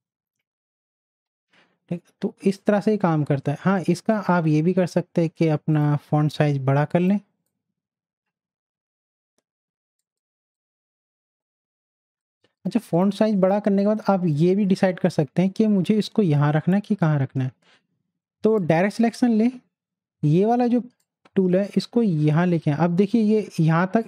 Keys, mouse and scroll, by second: 0.0-0.8 typing, 2.5-9.9 drag, 10.0 click, 18.6 click, 21.0-24.0 drag.